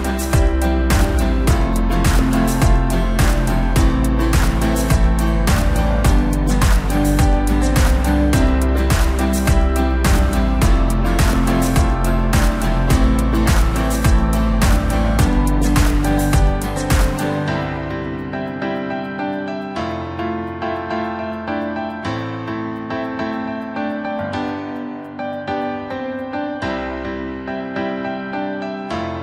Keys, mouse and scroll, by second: 0.0 click, 0.5 middle click, 0.8-1.2 scroll up 1, 1.2-2.6 right drag, 2.6-3.9 middle drag, 3.9 KP_1, 4.5-4.8 scroll up 2, 4.8-5.2 scroll down 1, 5.2-6.9 middle drag, 6.9 KP_7, 7.7 scroll down 4, 8.0-9.5 middle drag, 9.5 KP_1, 10.1-10.9 scroll up 1, 10.9 drag, 11.2-11.7 scroll up 1, 11.7-12.7 scroll down 2, 12.7-17.0 drag, 17.5-18.7 drag, 18.8-19.2 scroll up 1, 19.2-19.9 scroll down 3, 21.4 click, 22.8 click, 23.9-25.0 drag, 25.6-28.6 drag, 28.9 click.